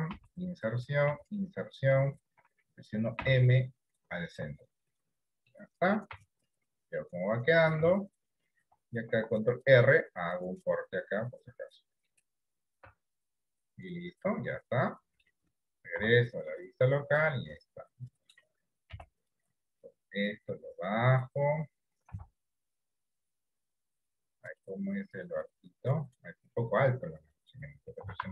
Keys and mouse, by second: 1.1 i, 3.2 m, 5.6 middle click, 6.3 Tab, 7.1 middle click, 7.9 Tab, 9.2 ctrl+r, 12.9 Tab, 13.3-15.3 middle drag, 16.2 KP_Divide, 17.5-18.5 middle drag, 19.0 KP_1, 20.5-21.5 drag, 22.3 KP_3, 24.6-25.7 drag, 28.1 s.